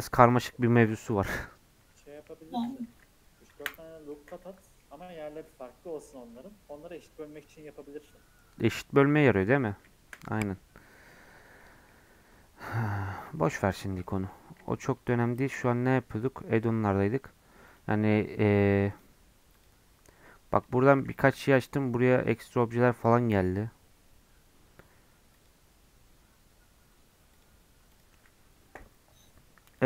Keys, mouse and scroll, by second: 0.3 click, 1.2 KP_Decimal, 1.6-2.6 scroll down 16, 2.6 click, 3.6 Delete, 3.8 scroll down 6, 4.1 middle click, 4.8 scroll up 1, 4.9 scroll down 1, 5.1 middle click, 5.8 scroll up 5, 6.1 middle click, 6.6-7.3 scroll up 1, 7.3-9.1 middle drag, 9.1 scroll down 1, 9.3-11.9 middle drag, 11.9 scroll up 2, 13.3 shift+middle click, 13.5 shift+scroll down 1, 13.5-15.2 middle drag, 15.2-16.2 shift+right drag, 16.2-17.6 drag, 17.6-18.9 right drag, 18.9-21.1 drag, 21.1 shift+a, 25.3-29.8 drag.